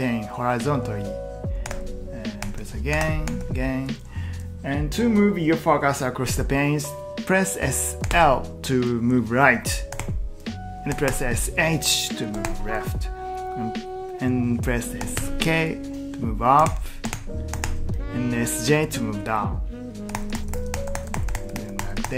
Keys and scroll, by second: 1.4-3.9 typing, 5.1 typing, 7.8-8.6 typing, 9.9-11.1 typing, 12.3 typing, 14.8-18.1 typing, 19.8-21.3 typing.